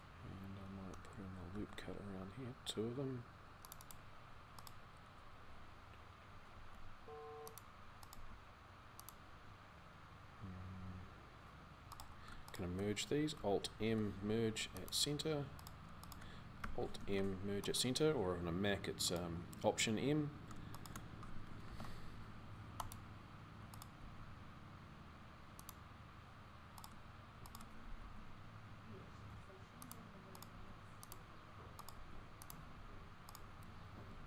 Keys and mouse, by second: 1.4 ctrl+r, 6.3 g, 7.9 g, 13.6 alt+m, 16.8 alt+m, 20.3-21.4 drag, 21.4 alt+m, 23.7 g, 27.8 g, 30.3 g, 33.6 click, 33.9 a.